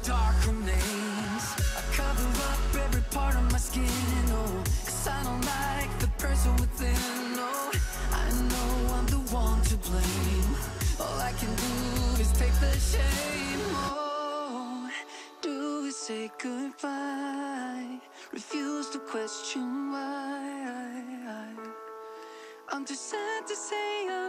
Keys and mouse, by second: 2.0 click, 3.0-4.0 middle drag, 5.1 click, 5.9 click, 6.1 click, 6.6 click, 8.0 click, 9.6 click, 10.0 middle click, 13.6 click, 15.8 f, 16.6 click, 17.0 click, 17.3 middle click, 18.2 click, 18.6 click, 19.1 middle click, 20.1 f, 20.8 click, 21.1 click, 21.3 click, 21.6 middle click, 22.2 middle click, 23.1 middle click, 23.5 click, 23.8 click.